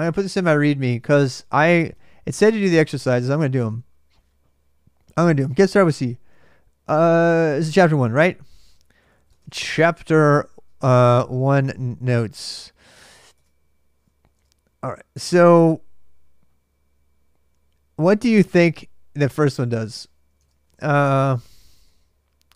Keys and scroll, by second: 0.0-0.7 typing, 0.7 Return, 2.1 ctrl+[, 2.3-3.5 typing, 2.5 Return, 8.9-12.4 typing, 12.7 Return, 13.1 Return, 13.8-14.6 typing, 20.1 alt+Tab, 20.6-21.5 typing.